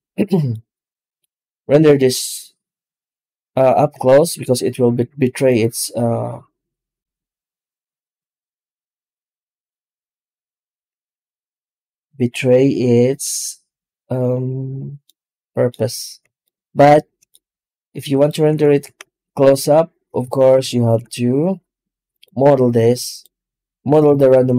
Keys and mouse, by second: 4.2 z, 10.8 z, 14.9-15.6 middle drag, 16.3-17.2 shift+middle drag, 17.9 right click, 18.3 Tab, 18.9 alt+shift+z, 20.1 alt+a, 20.7 ctrl+r, 22.8 Tab, 23.0 right click, 23.3 Tab, 24.2 ctrl+r.